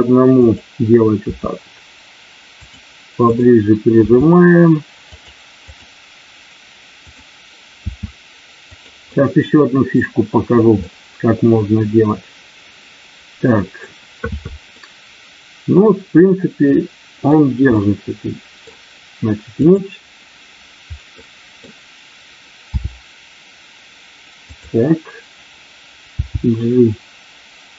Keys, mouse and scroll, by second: 0.4 click, 1.3 r, 2.5 click, 5.2 click, 5.7 click, 7.0 click, 7.8 r, 8.7 click, 10.8-13.8 middle drag, 14.8-17.3 middle drag, 17.8 middle click, 19.5 click, 21.1 middle click, 22.6 r, 24.5 click, 26.0 g.